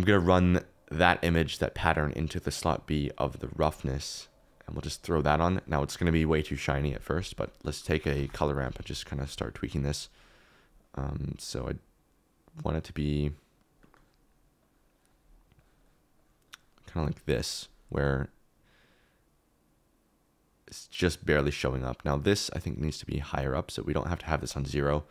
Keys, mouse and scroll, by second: 1.1-2.6 drag, 8.1 shift+d, 8.6 click, 8.9-10.8 middle drag, 13.0 middle click, 14.0 middle click, 14.6 click, 15.5 click, 16.1 click, 18.7-21.4 drag, 22.0 click, 22.6 click, 23.2 click.